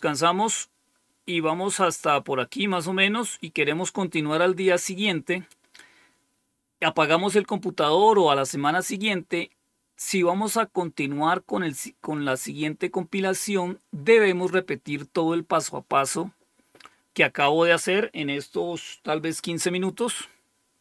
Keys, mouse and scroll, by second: 1.4-2.2 scroll down 2, 2.2-20.8 scroll down 1.